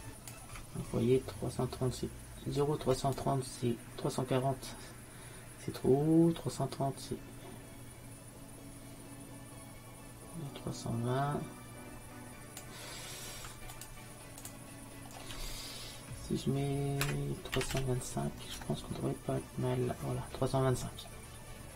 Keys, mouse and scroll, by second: 3.2-5.1 drag, 13.8-15.7 drag.